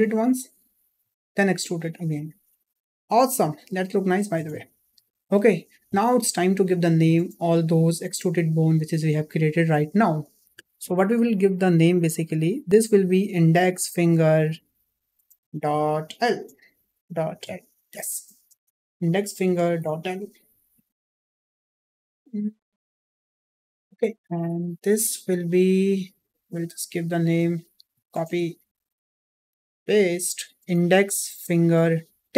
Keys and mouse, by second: 0.9 e, 2.7-4.3 middle drag, 6.1 shift+middle click, 9.0 click, 13.8-25.1 drag, 18.6 BackSpace, 25.8 click, 26.3 click, 27.0-28.5 drag, 29.8-32.3 ctrl+drag.